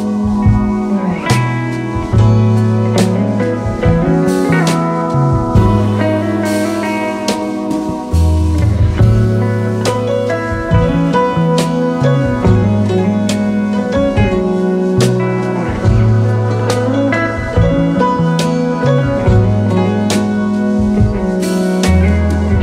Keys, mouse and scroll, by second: 3.0 alt+click, 9.8 double click, 17.4 space, 18.0 space, 18.4 alt+scroll up 2, 20.4-21.0 alt+scroll down 2, 22.0-22.6 typing.